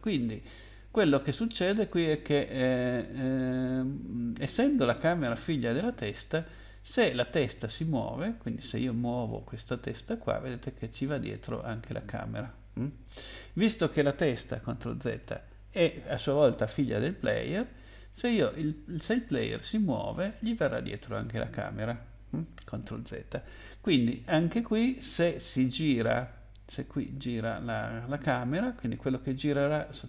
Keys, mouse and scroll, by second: 9.6 click, 14.9 ctrl+z, 17.0 click, 19.2 click, 22.6 ctrl+z.